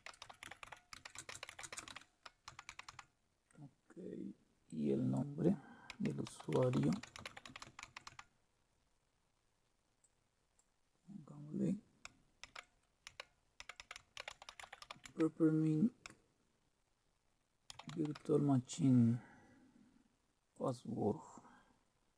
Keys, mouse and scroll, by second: 0.0-3.4 typing, 4.7 click, 5.7-8.6 typing, 10.0 click, 12.4-15.2 typing, 17.7 typing, 20.5 click.